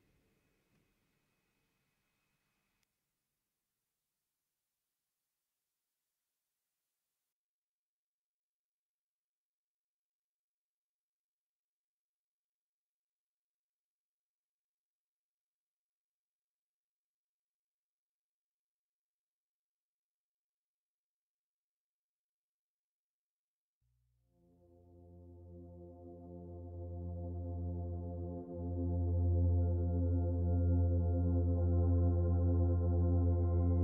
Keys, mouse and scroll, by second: 2.6 middle click, 7.4 click, 10.2 click, 11.4 middle click, 14.8 click, 17.8 middle click, 23.6 middle click, 26.3 click, 28.0 click.